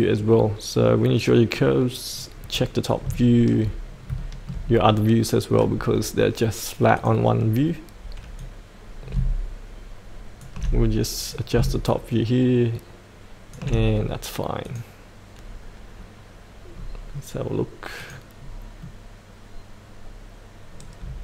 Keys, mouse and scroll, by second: 1.5 click, 2.4-3.0 scroll up 1, 3.1 shift+middle click, 3.8 scroll up 1, 4.2 shift+middle click, 6.9-11.0 drag, 11.3-14.1 drag, 15.3-16.7 scroll up 1, 16.7-17.9 scroll down 2, 17.9 click, 18.3 scroll up 1, 18.8-21.2 middle drag.